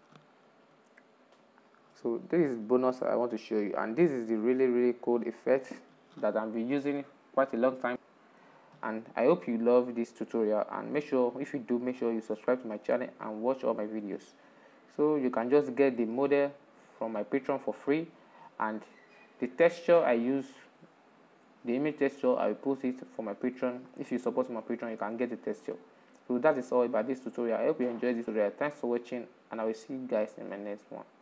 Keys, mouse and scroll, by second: 0.2 scroll down 4, 0.6-11.1 middle drag, 11.1 scroll down 4, 11.6-13.1 shift+middle drag, 13.1-17.1 drag, 17.1-27.5 right drag, 27.5 scroll up 2, 28.1-31.2 middle drag.